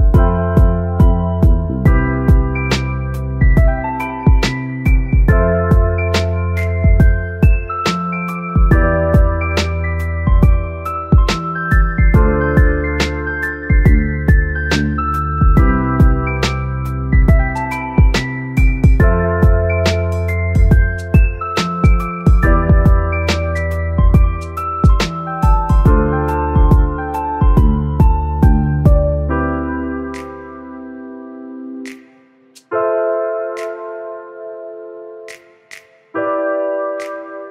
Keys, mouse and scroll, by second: 6.0 click, 7.5 x, 8.7 shift+a, 12.4 drag, 14.7 s, 16.6-20.5 drag, 21.2-23.9 drag, 24.9-26.0 middle drag, 26.0 shift+d, 26.9-27.3 drag, 29.7 r, 29.8 r, 34.4 click, 35.8 click.